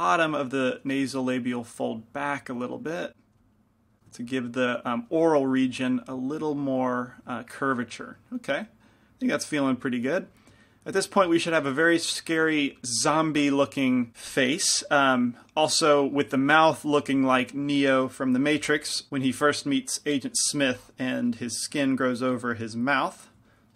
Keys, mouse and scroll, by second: 1.0 f, 3.4 f, 4.1 click, 6.8 click, 7.4-8.6 drag.